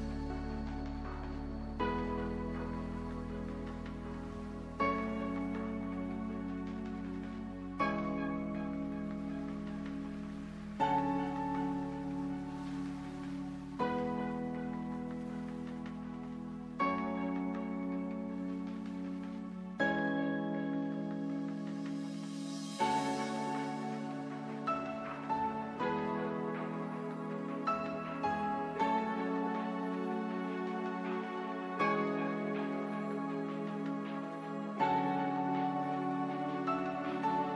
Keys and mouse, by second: 1.9 KP_1, 5.2 z, 7.3 ctrl+j, 10.7-27.3 drag, 27.3 s, 34.1 KP_Decimal.